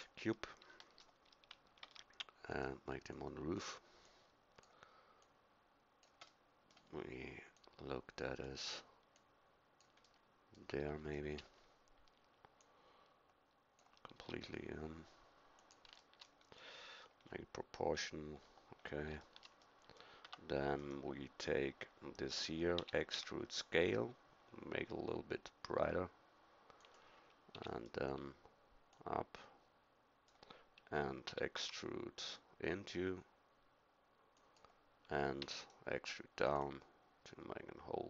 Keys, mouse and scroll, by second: 0.8-1.8 middle drag, 1.8 s, 11.2 middle click, 14.1 s, 20.2 Tab, 22.8 e, 27.5 e, 28.9-30.7 drag, 31.2 e, 35.4 e, 36.5-38.0 drag.